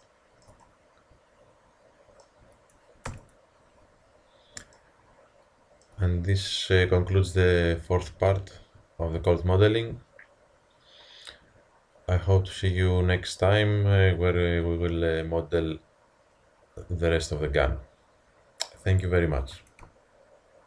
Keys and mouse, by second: 0.7-1.1 middle drag, 3.1 KP_1, 4.2-4.8 middle drag, 4.8-6.6 drag.